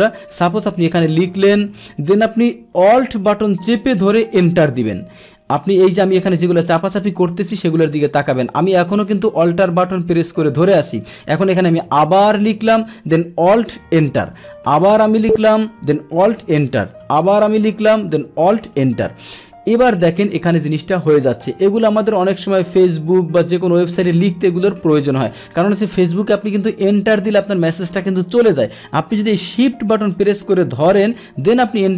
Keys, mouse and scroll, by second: 4.4 alt+Return, 13.9 alt+Return, 16.2 alt+Return, 18.5 alt+Return, 19.8 click, 20.4 click, 30.0 click.